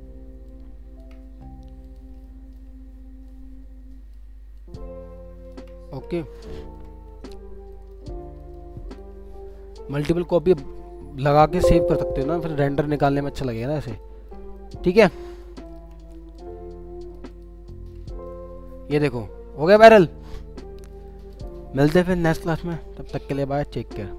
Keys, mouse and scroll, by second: 0.5 shift+click, 2.2 alt+middle click, 4.6 shift+click, 6.6 alt+middle click, 7.7 alt+middle click, 8.1 alt+scroll down 1, 8.4 middle click, 9.9 shift+click, 11.4 middle click, 12.6 alt+middle click, 14.0 alt+middle click, 15.3 alt+click, 15.6 ctrl+click.